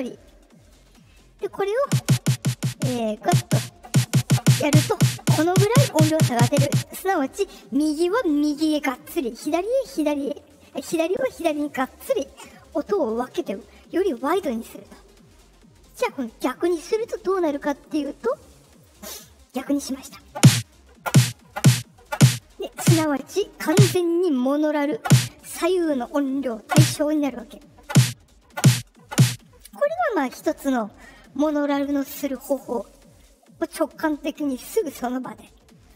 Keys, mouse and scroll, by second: 2.9 click, 17.8 click.